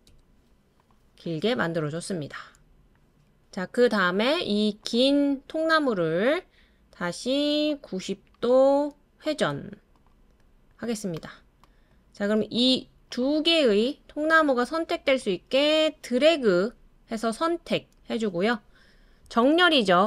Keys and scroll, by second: 0.0-0.1 typing, 12.3 typing.